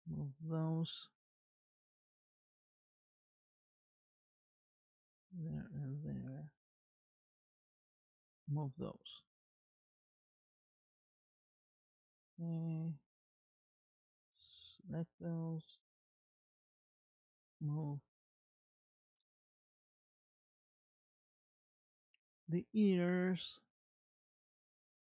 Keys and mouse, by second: 2.6 click, 3.3 r, 5.5 shift+click, 7.1 m, 9.0-10.0 middle drag, 11.0 click, 11.3 r, 14.4 shift+click, 16.5 m, 20.7 r.